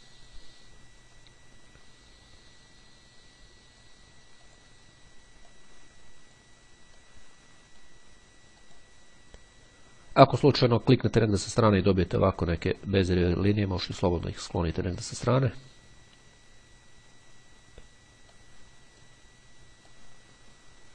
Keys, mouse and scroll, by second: 1.3-1.8 scroll down 1, 2.0-2.5 scroll up 2, 4.6 click, 5.6-7.0 drag, 7.2-8.5 drag, 8.8 click, 10.8 click, 13.0-14.7 drag, 17.0-19.7 drag, 20.1-20.9 drag.